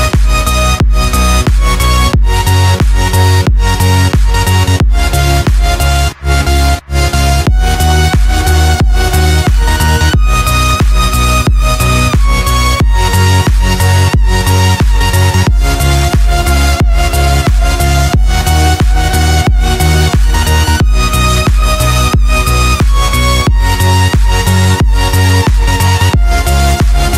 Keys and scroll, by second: 0.0-2.4 typing, 0.8 super+space, 0.9 super+space, 0.9 super+space, 1.0 super+space, 1.5 super+space, 4.0 space, 4.5 alt+super+space, 4.6 alt+super+space, 4.6 alt+super+space, 4.7 alt+super+space, 5.1-5.6 alt+super+space, 7.9-8.8 typing, 11.1 p, 17.2 z, 18.1 a, 18.9 v, 19.8 v, 23.7 a.